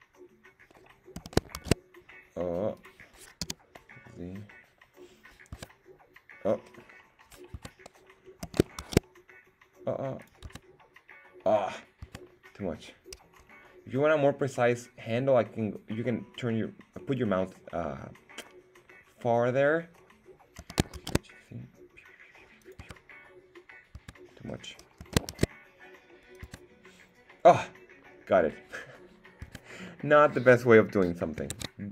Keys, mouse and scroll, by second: 0.9 shift+z, 1.4 s, 1.5 shift+z, 2.7 click, 3.4 z, 5.5 Tab, 7.5 Tab, 8.4 s, 8.8 shift+z, 10.2 click, 10.4 Tab, 12.0 Tab, 20.6 s, 20.9 shift+z, 22.6 click, 22.8 Tab, 23.9 Tab, 25.0 s, 25.3 shift+z, 26.3 click, 26.4 Tab, 29.4 Tab, 30.0 middle click, 31.5 ctrl+Tab.